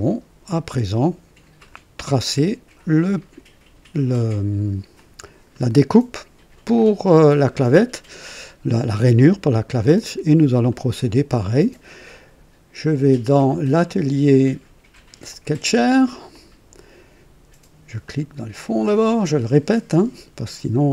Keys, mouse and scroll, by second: 4.9 click, 9.9 click, 10.6 right click, 13.8 click, 15.2 click, 16.3 click, 18.0 click.